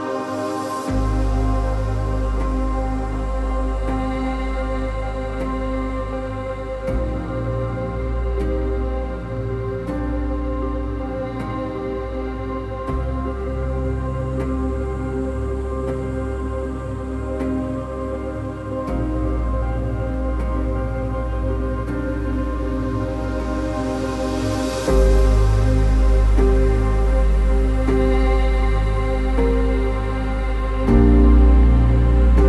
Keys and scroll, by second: 3.5 ctrl++, 3.6 ctrl++, 3.7 ctrl++, 3.8 ctrl++.